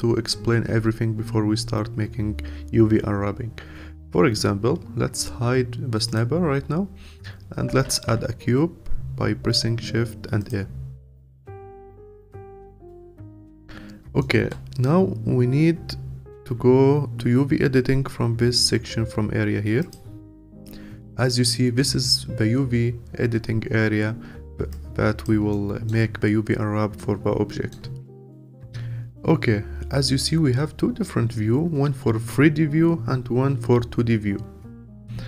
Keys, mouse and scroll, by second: 6.0 click, 10.5 shift+a, 11.1-12.6 scroll up 7, 12.6-19.9 alt+middle drag, 19.9 click, 23.7-24.7 scroll down 3, 24.7 alt+click, 25.5-28.1 alt+middle drag, 28.1 scroll up 2.